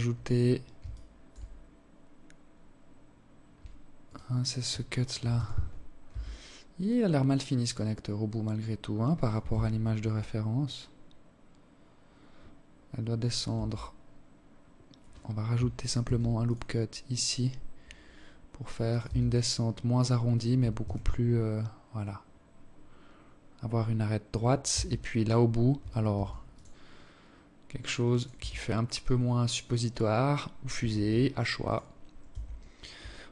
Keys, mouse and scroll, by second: 0.3 scroll up 2, 2.7 alt+right click, 4.1 z, 4.9 Tab, 5.4 scroll down 8, 6.2-6.7 scroll down 2, 6.7-8.2 scroll up 7, 8.2 z, 10.2-11.1 scroll down 5, 11.1-11.9 scroll up 8, 12.3 Tab, 14.7 ctrl+r, 17.7 Tab, 19.5 z, 20.0-20.9 scroll down 7, 20.9 scroll down 2, 20.9-22.4 scroll up 7, 23.4 Tab, 24.9 ctrl+r, 27.1 Tab, 27.5-28.7 scroll down 7, 28.7-29.0 scroll up 7, 29.7 ctrl+r, 30.3 right click, 30.9 Tab, 32.1 ctrl+r.